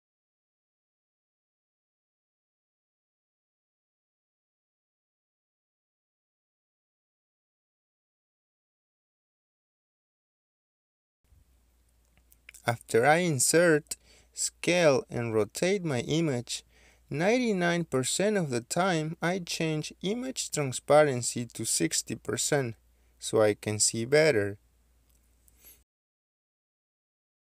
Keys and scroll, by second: 0.2-1.1 typing, 1.9 Return, 25.0 typing, 25.4 Return, 26.1 Escape.